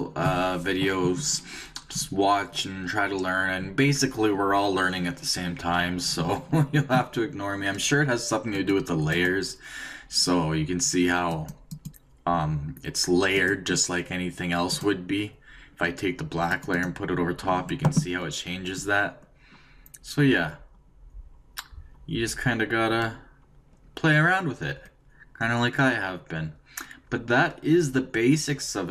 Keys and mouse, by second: 8.5-10.9 drag, 11.3-16.2 drag.